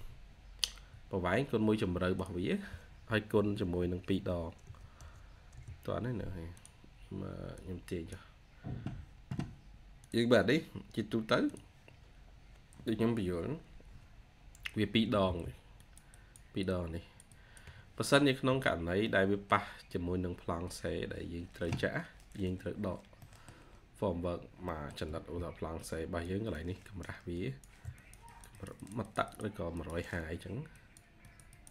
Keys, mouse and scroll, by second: 4.3-5.0 typing, 5.4 Return, 12.7 scroll down 1, 13.6 scroll up 1, 15.2 ctrl+q, 18.2 Escape, 18.3 Escape, 18.7 scroll down 1, 18.9 middle click, 19.9-20.4 scroll up 1, 20.4 scroll down 1, 22.3-22.8 scroll up 1, 23.1 middle click, 23.6 scroll up 1, 24.6 middle click, 25.3 ctrl+q, 28.1 double click, 30.6 ctrl+q, 31.4 double click.